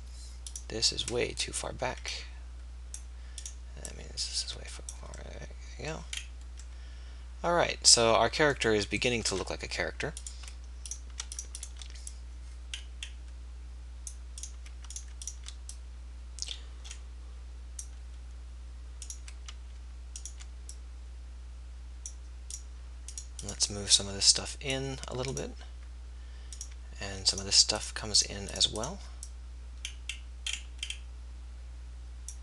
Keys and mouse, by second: 1.2-3.5 middle drag, 3.5 click.